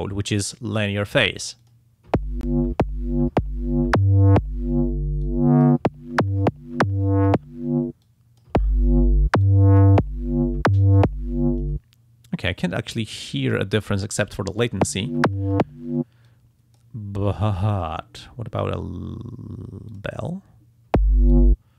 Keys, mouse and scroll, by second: 1.6 click, 5.2 click, 8.0 click, 9.4 click, 13.4-14.4 drag, 16.3 click, 17.4 click, 19.9 click, 21.3-21.7 drag.